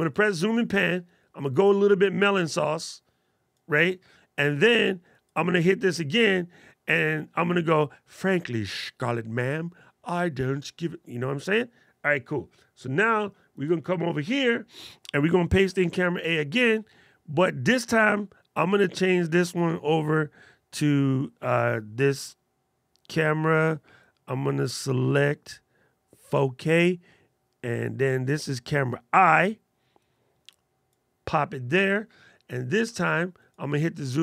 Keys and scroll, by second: 15.6 super+v.